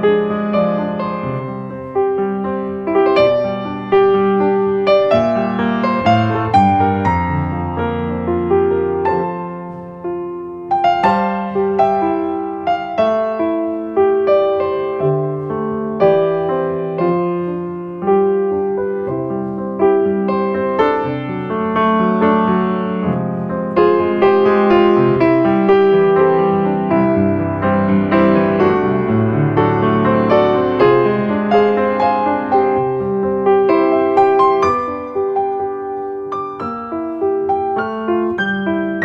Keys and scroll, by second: 0.5 space, 4.0 ctrl+space, 6.3 space, 11.7 space, 19.6 ctrl+space, 24.3 space, 25.2 ctrl+space, 36.0 space.